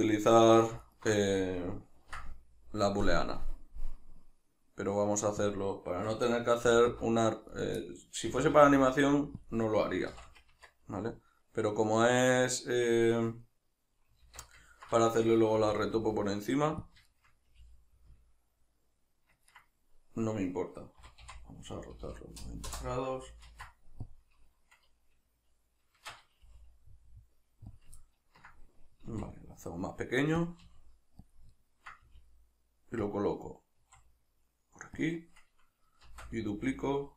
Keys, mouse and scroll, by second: 0.8 ctrl+alt+right click, 1.3-5.6 middle drag, 2.0 ctrl+b, 5.6 click, 6.0 a, 7.6 right click, 7.8-9.5 middle drag, 8.3 s, 9.5 click, 10.1 shift+n, 10.6 Tab, 10.9-16.9 middle drag, 14.3 alt+q, 15.6 s, 16.9 click, 17.1-19.6 shift+middle drag, 17.5 g, 19.6 right click, 21.0 r, 23.5 ctrl+a, 26.0 shift+Tab, 27.8 click, 28.0-30.5 ctrl+middle drag, 29.1 s, 30.5 click, 30.6 g, 31.4 click, 31.6-33.2 ctrl+middle drag, 32.1 g, 33.2 click, 33.8 s, 35.1 click, 36.1 shift+d, 37.0 click.